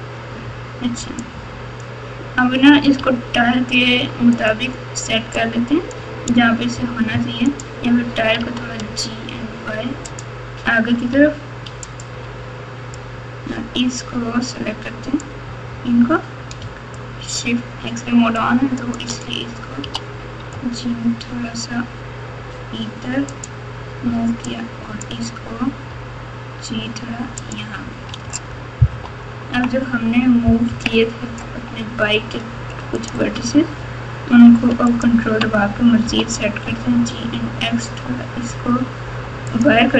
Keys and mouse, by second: 1.2 click, 2.9 g, 5.3 click, 5.5 click, 7.1 Tab, 7.5 click, 8.4 g, 11.1 Tab, 11.6 Tab, 11.9 click, 12.2 Tab, 12.9-15.2 drag, 16.9 shift+click, 18.4-18.9 shift+drag, 19.8 g, 24.5 click, 25.8 g, 28.2 alt+z, 29.0 KP_4, 29.3 KP_4, 29.5 KP_4, 30.7 KP_6, 32.9 click, 34.9 ctrl+click, 36.0 g.